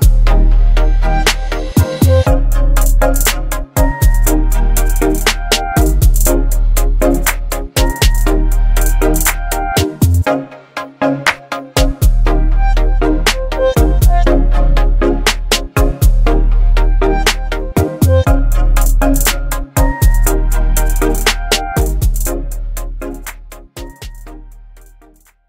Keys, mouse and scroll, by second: 1.7 ctrl+t, 3.3-4.2 drag, 5.9-7.4 alt+drag, 12.4 click, 15.4 click.